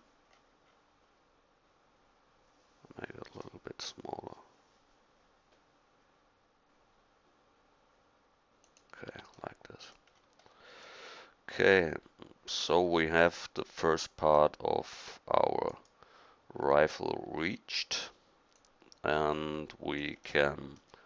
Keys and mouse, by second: 9.1 Tab, 11.1 middle click.